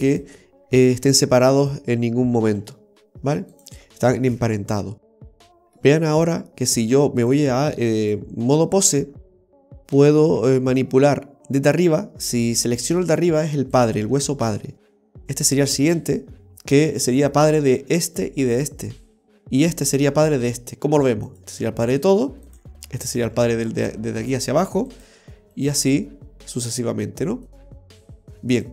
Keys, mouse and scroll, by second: 1.0 ctrl+z, 1.7 right click, 2.5 g, 4.4 ctrl+z, 5.5 Delete, 5.5 shift+middle click, 5.5 scroll down 2, 6.0-7.1 scroll up 2, 7.1 scroll up 1, 7.2 click, 8.9 right click, 9.2-10.4 scroll down 3, 10.4 g, 15.2 right click, 15.4 g, 18.1 right click, 18.7 right click, 19.9 right click, 21.4 right click, 21.5 g, 23.1 right click, 23.2 g, 25.6 right click, 25.7 g, 27.5 right click, 27.7 g.